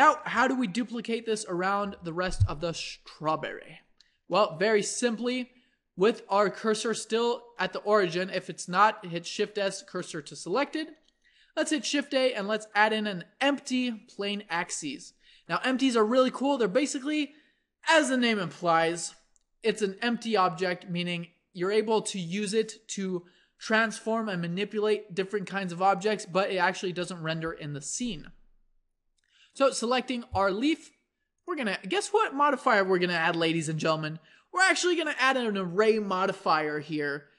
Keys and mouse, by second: 1.2 KP_7, 3.8-8.2 middle drag, 8.2 click, 9.2 shift+s, 9.8 click, 10.7 a, 11.6 shift+a, 29.6-31.2 drag, 33.0-37.3 drag.